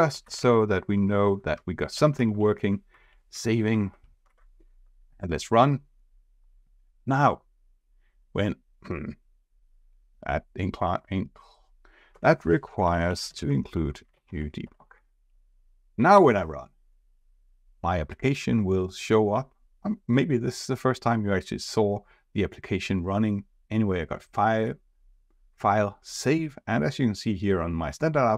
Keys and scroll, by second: 5.1 ctrl+r, 15.9 ctrl+r.